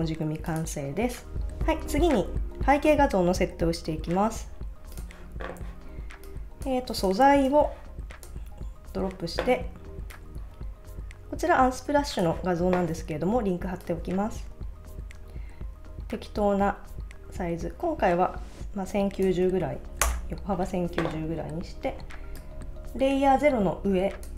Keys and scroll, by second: 20.0 Return.